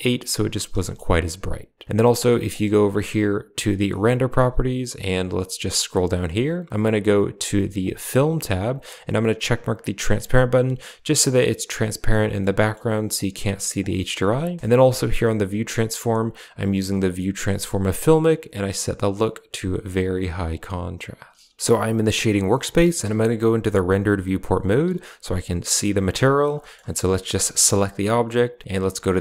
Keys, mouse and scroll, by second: 2.4 click, 3.5 click, 7.4 click, 8.2 click, 12.4 click, 13.7 click, 14.6 KP_0, 16.5 click, 19.2-21.1 drag, 21.6 a, 22.0 click, 23.1 z, 24.7 z, 25.9 click, 26.5 shift+click, 27.2 shift+click.